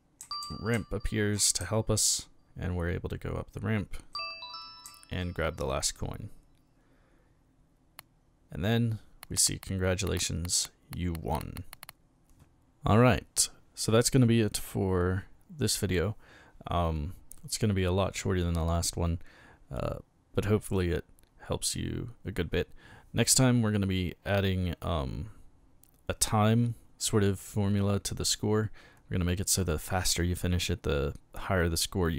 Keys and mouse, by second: 0.0-1.6 typing, 4.8 a.